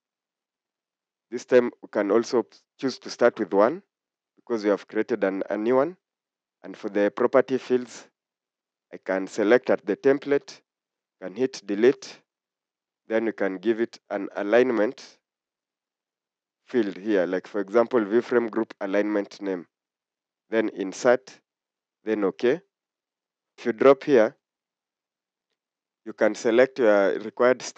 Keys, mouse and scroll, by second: 3.4 1.